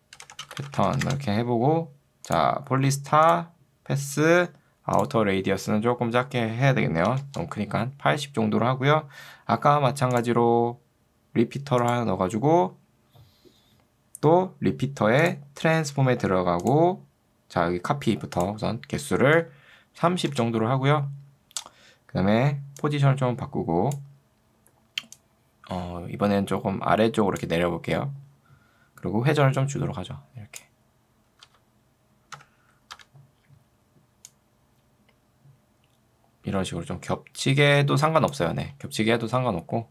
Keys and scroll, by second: 0.5-1.4 typing, 7.1 0, 7.3 Return, 20.1 0, 20.3 Return, 33.1 v.